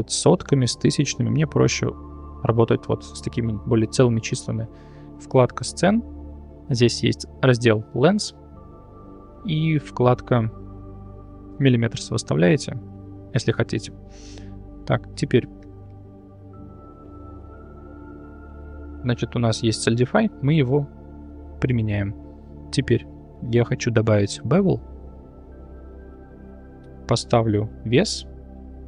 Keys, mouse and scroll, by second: 1.4-2.8 shift+drag, 3.3 shift+click, 5.6 click, 8.0-12.5 drag, 15.9 middle click, 18.4 middle click, 20.5 click, 21.5 ctrl+a, 22.0-22.3 middle drag, 23.4-25.5 drag, 27.4-27.9 drag.